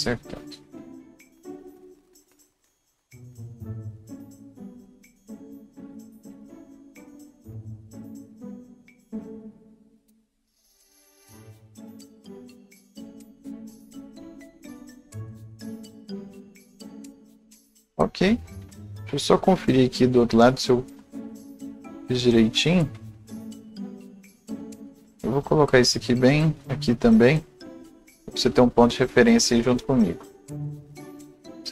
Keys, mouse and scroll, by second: 6.6 right click, 6.7 scroll down 1, 6.7 scroll up 1, 6.9 right click, 7.5 click, 8.6 scroll down 1, 8.7 scroll up 1, 8.9-12.5 drag, 11.3 c, 12.2 right click, 12.5-16.3 drag, 16.4-18.3 drag, 17.1-18.7 right drag, 18.3-18.7 scroll up 1, 18.7-19.1 scroll down 1, 20.9 click, 22.2 scroll up 1, 23.8 click, 24.8-30.5 drag, 27.8-30.3 right drag, 30.3 scroll down 1, 30.5 scroll up 1, 30.8 click, 31.0-31.7 right drag, 31.1 scroll down 1, 31.2-31.7 scroll up 1.